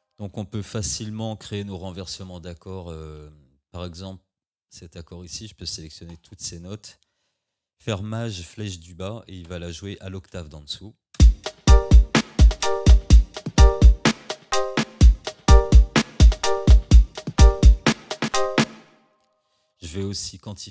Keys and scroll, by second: 9.5 shift+Down, 11.2 space, 18.6 space.